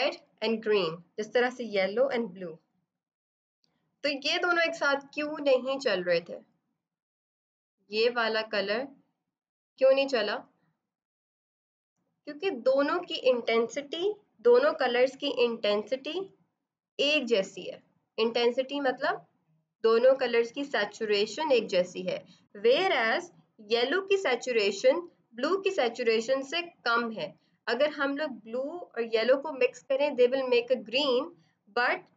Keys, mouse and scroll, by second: 5.0 click.